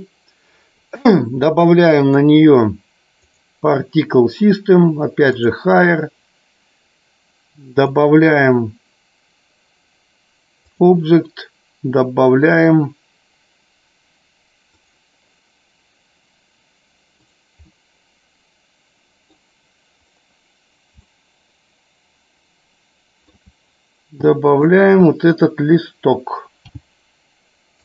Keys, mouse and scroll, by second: 3.3-4.2 drag, 6.2-7.2 drag, 8.3-11.6 drag, 14.7 click, 18.2-20.1 middle drag, 21.8-24.2 shift+middle drag, 24.9 click.